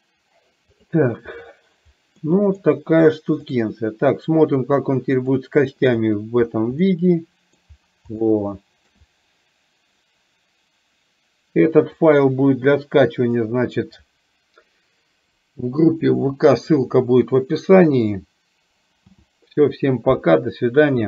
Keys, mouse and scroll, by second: 0.9 click, 2.4 middle click, 2.6 scroll down 1, 5.2 click, 7.0 middle click, 8.4 shift+middle click, 12.2 click, 19.1 n.